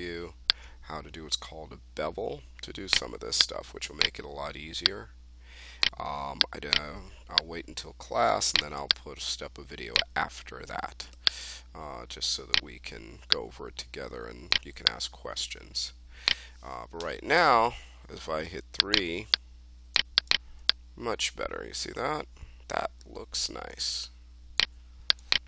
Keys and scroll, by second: 16.9 3.